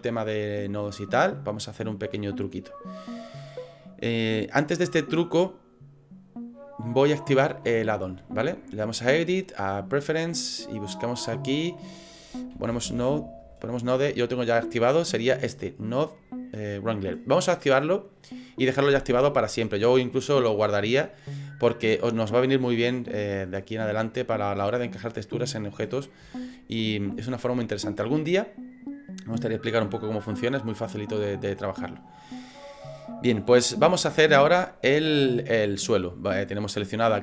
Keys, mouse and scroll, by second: 9.0 click, 32.5 middle click, 33.6 scroll up 4, 34.1 shift+middle click.